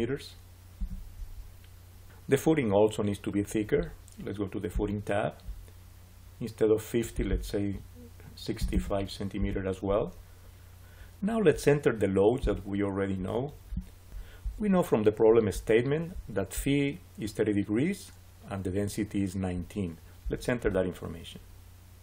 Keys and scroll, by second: 0.7 Return, 8.2-9.1 typing, 9.3 Return.